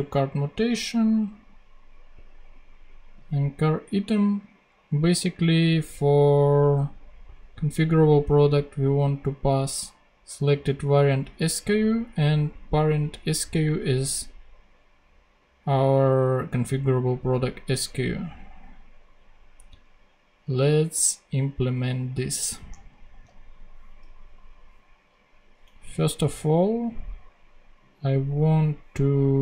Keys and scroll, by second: 22.4 super+Tab.